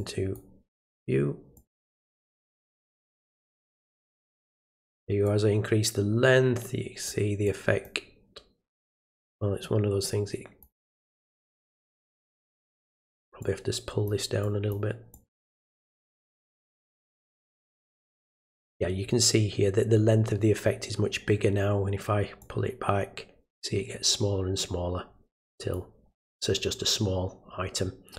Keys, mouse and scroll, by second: 1.5 click, 2.4 click, 3.0 click, 3.5 click, 5.2-7.0 drag, 7.4 click, 9.3-10.6 drag, 12.3-12.9 drag, 13.4-14.0 drag, 14.4 click, 15.1 click, 16.3 click, 17.1-18.1 drag, 22.4-25.7 drag.